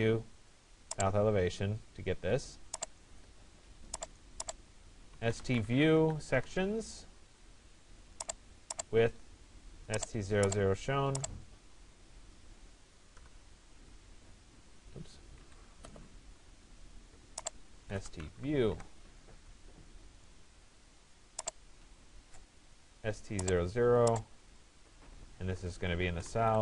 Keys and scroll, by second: 5.9 Return, 12.8 Return, 15.5 Escape, 18.8 Return.